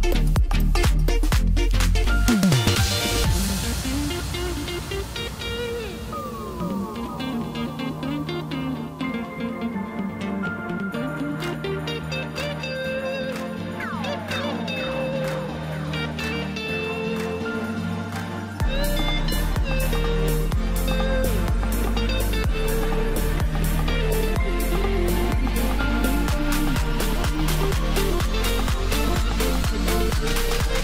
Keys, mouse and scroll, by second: 0.5 s, 7.7 KP_7, 9.6 click, 10.4 s, 14.5 KP_1, 15.9 click, 17.0 e, 19.3-20.8 scroll down 2, 20.8-21.2 scroll up 1, 21.3 scroll down 2, 21.5-24.0 middle drag, 24.0 KP_1, 24.7-25.1 scroll up 1, 25.9-26.6 scroll down 1, 27.1 ctrl+r, 30.4-30.8 scroll down 1.